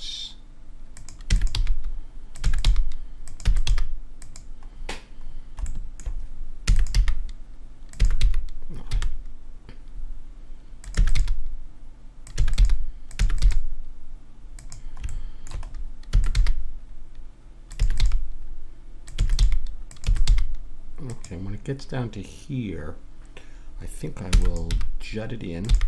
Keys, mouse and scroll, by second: 1.2-3.7 typing, 4.7 middle click, 6.6 e, 7.0 g, 8.0 e, 11.0 e, 11.2 g, 12.4 e, 12.6 g, 13.2 e, 13.4 g, 16.1 e, 16.3 g, 17.8 e, 18.0 g, 19.2 e, 19.4 g, 20.1 e, 20.2 g, 24.2 e, 24.7 g, 25.7 g.